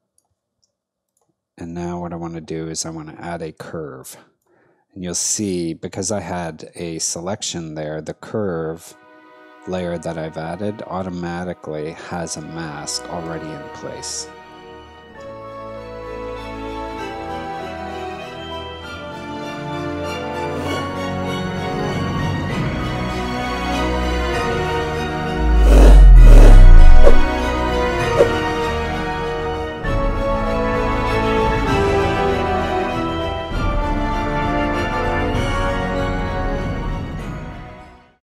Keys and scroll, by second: 13.3 space.